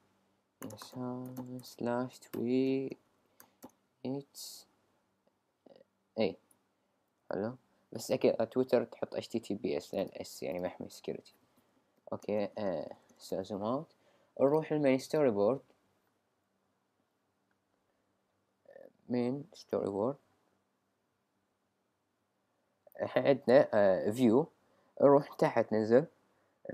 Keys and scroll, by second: 0.6 y, 1.9-4.7 typing, 7.0 Right, 12.0 alt+super+=, 12.2 alt+super+-.